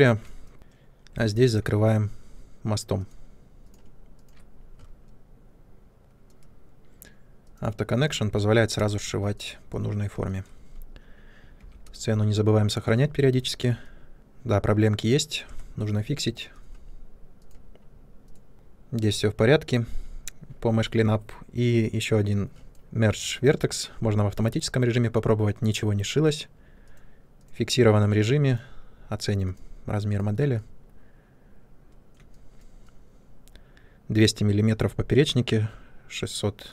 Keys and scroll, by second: 1.1 2, 8.7 space, 11.5 ctrl+s, 13.2 Tab, 15.4 Tab.